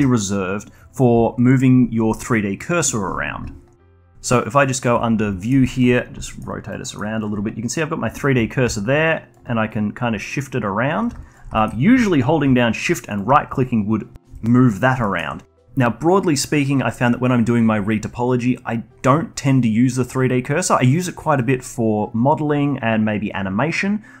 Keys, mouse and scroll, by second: 1.2-4.1 alt+drag, 4.5 click, 5.4 middle click, 5.6 alt+drag, 5.9 scroll down 3, 6.2 alt+middle drag, 6.5-6.8 alt+drag, 6.8 alt+middle click, 7.0-11.5 alt+drag, 11.5-13.1 alt+middle drag, 13.1 shift+right click, 14.6-15.3 alt+drag, 15.3-18.5 alt+middle drag.